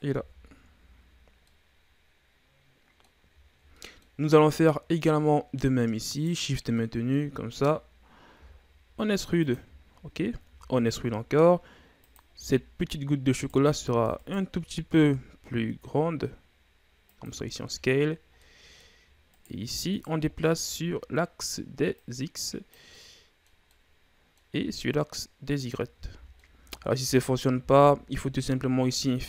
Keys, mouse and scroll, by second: 0.1 Tab, 0.6-1.5 scroll down 4, 1.5-3.4 middle drag, 3.4-3.7 ctrl+scroll up 1, 3.7-4.1 middle drag, 4.1 scroll up 2, 4.4 Tab, 5.2 middle click, 6.1 right click, 6.7 scroll down 1, 6.7 middle click, 7.5 shift+right click, 8.4 e, 9.7-10.5 shift+scroll down 1, 10.5 e, 12.5-13.3 scroll up 1, 13.3 right click, 14.2 shift+right click, 14.9 s, 17.5-18.4 shift+scroll down 2, 18.4 middle click, 19.3 right click, 19.9 shift+right click, 21.1 middle click, 21.9-22.9 drag, 22.9 middle click, 23.6 scroll down 1, 23.7-24.9 middle drag, 24.9-25.9 drag, 25.9 ctrl+z, 26.4 middle click, 27.0 ctrl+z, 27.6 ctrl+z, 28.9 ctrl+r.